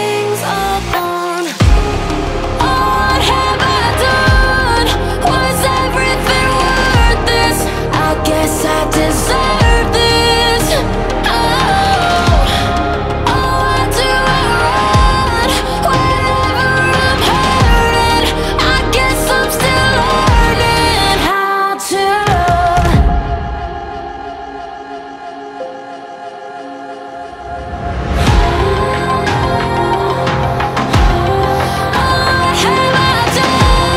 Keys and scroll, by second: 3.2 x, 31.5 ctrl+z, 32.9 ctrl+z.